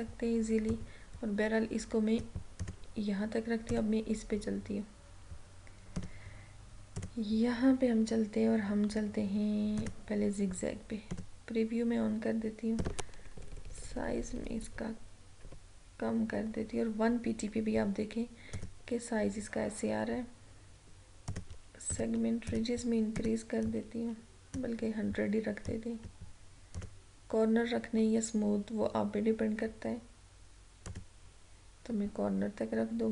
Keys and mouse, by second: 6.1 click, 9.9 click, 18.7 click, 21.4-26.9 drag, 31.0 click.